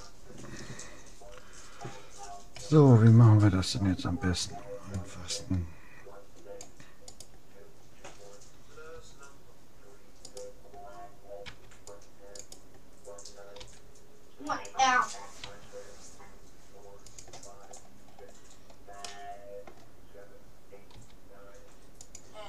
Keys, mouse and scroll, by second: 2.5 a, 4.4 c, 8.9 g, 11.4 c, 12.4-14.0 drag, 13.6 g, 15.4 s, 17.6-19.8 middle drag, 19.8-20.8 drag, 20.9 g.